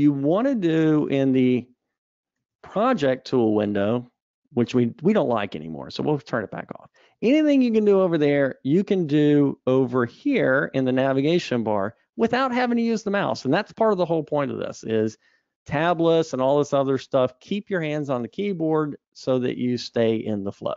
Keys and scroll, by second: 3.4 super+1, 11.0 super+Up.